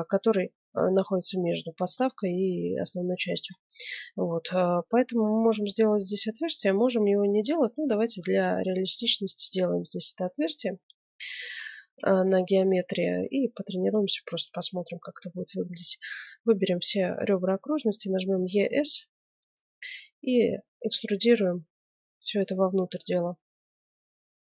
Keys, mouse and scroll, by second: 7.7-9.8 middle drag, 10.5-16.0 middle drag, 18.3 e.